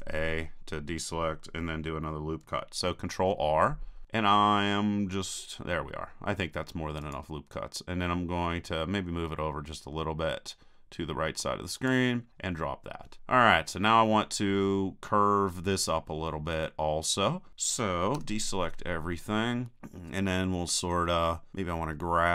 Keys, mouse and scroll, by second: 3.2 ctrl+r, 11.9-13.2 drag, 18.1 a, 18.7-19.9 middle drag, 21.9-22.3 middle drag.